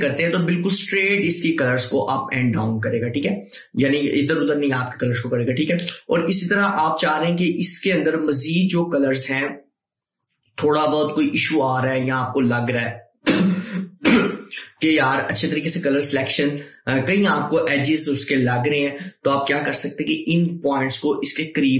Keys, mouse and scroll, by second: 10.6-14.7 drag, 20.6-21.7 drag.